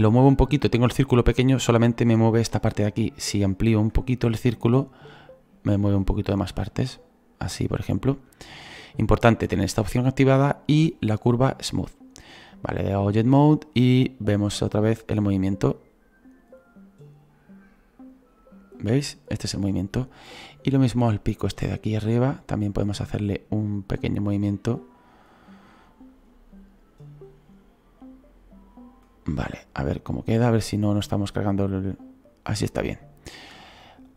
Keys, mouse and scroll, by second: 11.5-22.7 drag, 22.7 right click, 23.4 middle click, 24.1-26.1 right drag, 26.1-33.8 drag, 33.8-34.1 shift+middle drag, 34.0-34.1 drag.